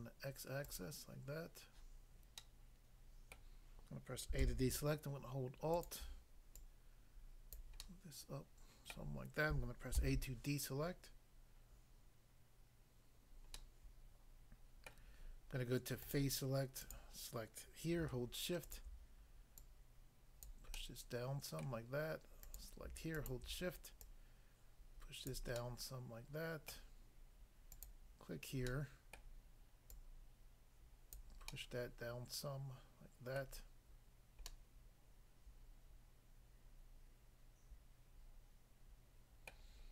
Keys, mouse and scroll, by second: 0.7 click, 0.8 click, 2.4 middle click, 3.3 middle click, 4.4 a, 5.8 alt+click, 6.6 alt+click, 7.5 click, 7.8 middle click, 8.9 middle click, 10.0 a, 13.5 middle click, 14.9 middle click, 16.1 click, 16.2 click, 16.8 click, 17.0 click, 18.6 shift+click, 19.6 shift+click, 20.5 click, 20.8 middle click, 21.6 middle click, 22.4 click, 22.6 click, 23.3 shift+click, 24.0 shift+click, 25.3 click, 25.6 middle click, 26.7 middle click, 27.8 click, 28.6 middle click, 29.1 middle click, 29.9 click, 31.1 click, 31.4 middle click, 33.4 middle click, 33.6-34.5 scroll down 1, 34.5 middle click, 39.6 middle click.